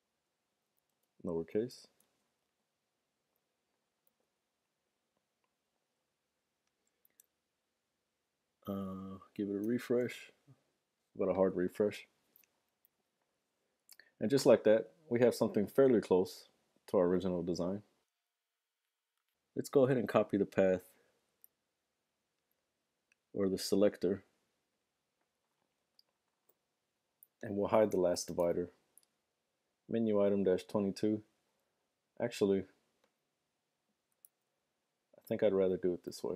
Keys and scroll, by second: 2.0 super+s, 2.0 typing, 3.3 super+Tab, 11.1 shift+super+r, 28.5 super+v, 34.2 super+c, 35.5 super+c, 36.1 super+v.